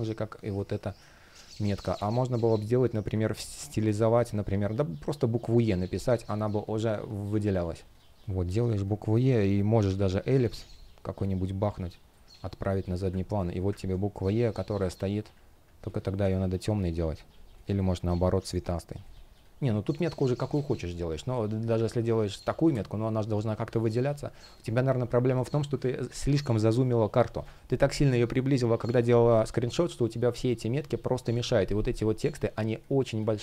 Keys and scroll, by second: 1.1 space, 5.9 space, 14.1 space, 19.8 Delete, 20.2 space, 22.3 Delete, 31.0 shift+p.